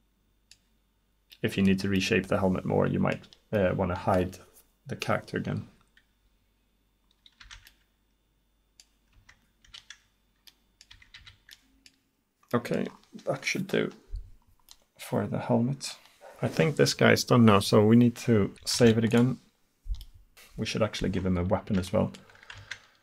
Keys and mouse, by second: 4.0-7.1 middle drag, 7.2 middle click, 7.4 Tab, 9.2 Tab, 9.7 a, 11.0 Tab, 11.2 a, 18.9 ctrl+s, 21.2-22.1 middle drag.